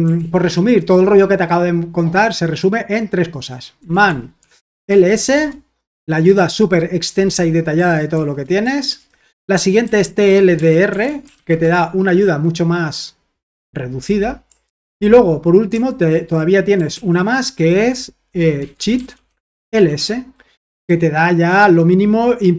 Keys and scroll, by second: 0.1 ctrl+l, 3.5-5.3 typing, 7.9-11.8 typing, 16.9 ctrl+l, 18.3-20.2 typing.